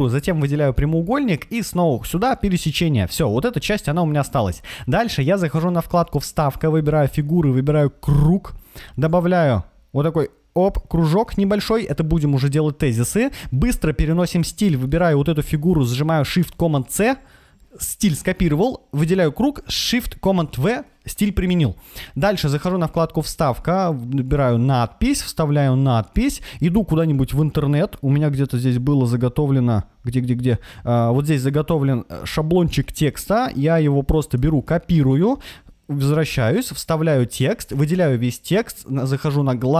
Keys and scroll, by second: 16.7 shift+super+c, 20.2 shift+super+v, 34.2 super+c, 36.2 super+v, 37.6 super+a.